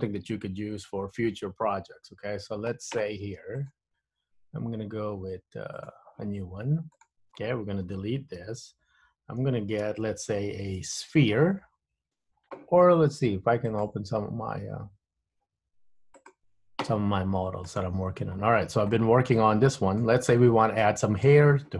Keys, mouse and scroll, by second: 3.7 click.